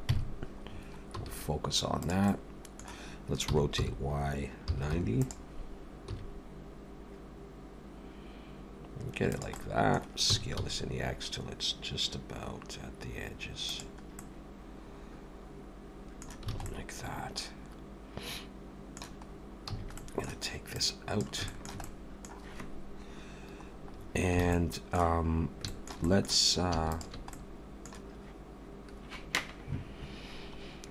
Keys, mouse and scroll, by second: 0.1 KP_Decimal, 0.7-1.8 scroll down 5, 1.2 s, 2.3 middle click, 3.4 r, 6.1 s, 9.6 middle click, 10.3 s, 14.2 middle click, 16.5 alt+a, 16.7 middle click, 19.3 scroll down 3, 19.7 a, 20.0 middle click, 20.7 click, 21.5 shift+middle click, 21.8 middle click, 23.9-24.4 scroll up 2, 24.4 alt+a, 24.5 middle click, 25.4 scroll up 2, 25.7 shift+middle click, 26.0 middle click, 26.9 alt+shift+click, 27.3 middle click.